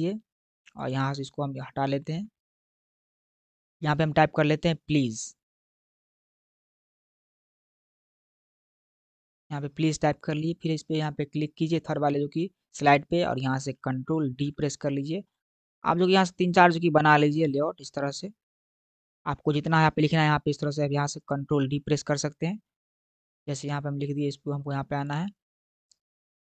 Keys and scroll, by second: 1.9 BackSpace, 6.0-7.7 typing, 14.2 ctrl+d, 16.8 ctrl+d.